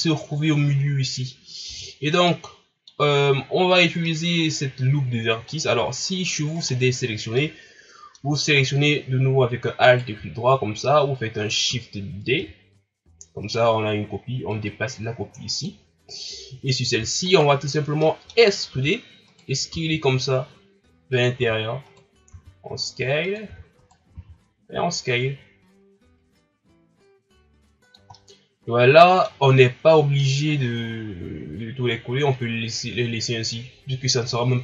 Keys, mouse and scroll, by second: 1.7 Tab, 2.0 scroll down 3, 2.3 middle click, 3.1-4.0 scroll up 1, 4.0-6.6 middle drag, 6.6 right click, 7.4-9.8 middle drag, 9.8 alt+right click, 12.3 shift+d, 14.5-17.3 drag, 17.3 alt+right click, 18.0 middle click, 18.7 e, 19.7 s, 22.3 s, 23.4 e, 24.1 s, 28.1-33.2 middle drag.